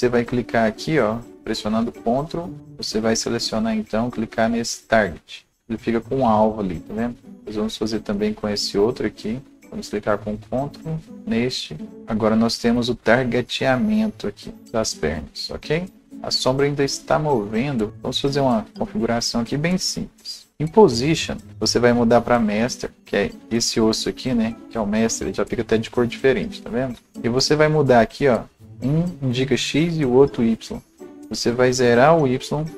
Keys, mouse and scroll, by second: 1.3 ctrl+p, 1.3 alt+click, 1.3-2.9 right drag, 6.2 alt+scroll up 1, 7.3-8.0 alt+scroll down 1, 8.0-17.9 alt+drag, 11.9-12.3 scroll up 1, 17.6 ctrl+z, 17.9 alt+click, 17.9 p, 18.6 alt+click, 21.5 click, 27.5 click, 30.0 click, 32.6 KP_0.